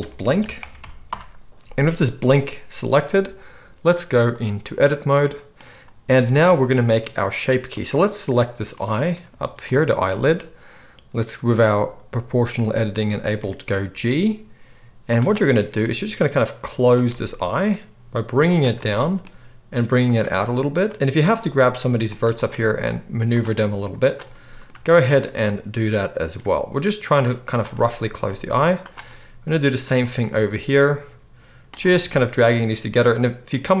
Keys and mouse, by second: 7.8-9.6 middle drag, 9.6 shift+click, 9.7-20.7 shift+middle drag, 13.9 g, 15.8 g, 17.8 g, 19.2 g, 20.7 click, 21.3-24.0 middle drag, 21.3 g, 22.5 g, 24.0 click, 24.1 middle click, 25.0 shift+click, 25.1-28.8 shift+middle drag, 26.4 g, 28.8 click, 28.9-33.8 middle drag, 30.3 g.